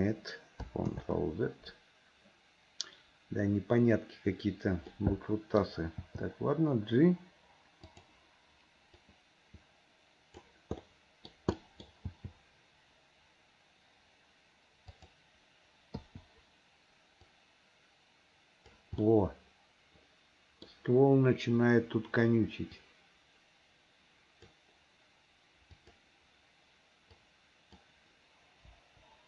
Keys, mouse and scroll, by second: 1.0 ctrl+z, 5.0 middle click, 6.1 g, 9.1-10.6 drag, 10.9 middle click, 11.6 middle click, 12.2 g, 16.1 i, 17.4-18.8 drag, 19.1-20.7 middle drag, 22.9-24.6 drag, 25.9 click, 27.1 click, 27.4 click, 28.8 Delete.